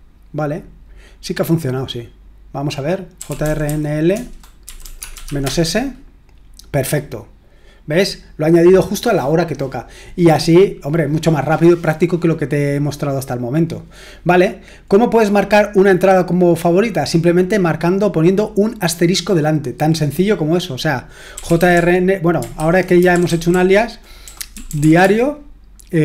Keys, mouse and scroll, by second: 2.9-5.7 typing, 21.1-25.5 typing, 22.5 ctrl+w.